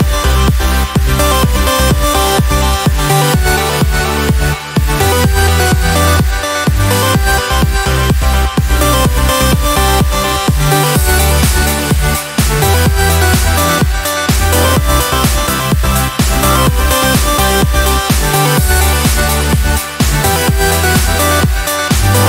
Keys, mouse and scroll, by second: 1.7 click, 3.6-7.9 drag, 8.2-10.9 drag, 12.1-13.9 drag, 15.9 ctrl+shift+9, 19.3 KP_5, 22.0 ctrl+scroll up 2.